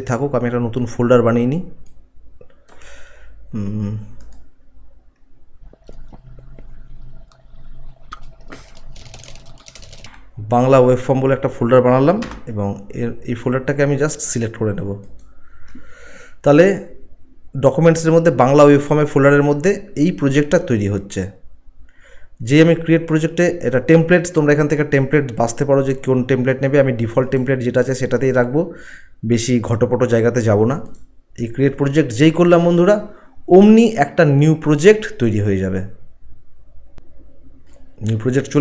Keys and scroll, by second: 8.9-10.0 typing, 16.1 Return.